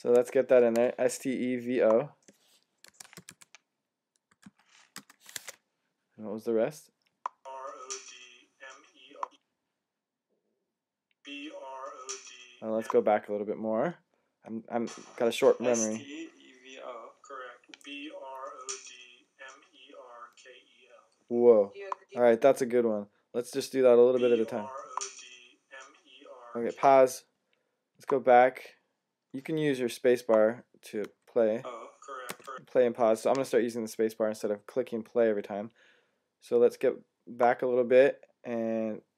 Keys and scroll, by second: 2.8-4.8 typing, 5.2 Tab.